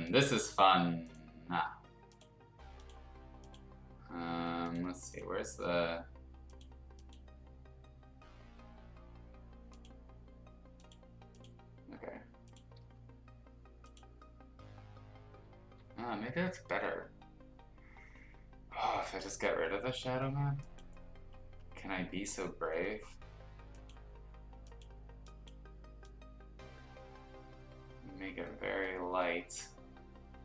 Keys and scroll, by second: 12.8 b.